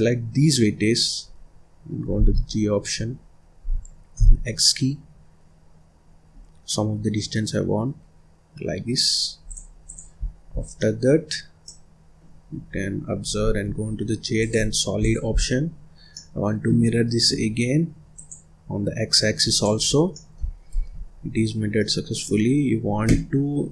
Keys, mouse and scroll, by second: 2.1 g, 9.7 click, 10.1-10.7 scroll down 5, 10.7 middle click, 11.1-11.5 scroll up 1, 11.5-12.8 middle drag, 12.8-13.5 scroll up 1, 13.5 z, 14.9 click, 15.2 scroll down 1, 15.3 middle click, 15.8 scroll up 3, 16.0 scroll down 1, 16.0-18.0 middle drag, 18.0 click, 19.3 click, 19.8 scroll down 1, 20.0 middle click, 20.7 ctrl+s, 21.3 scroll up 1, 21.5 scroll down 3, 21.7-23.7 middle drag.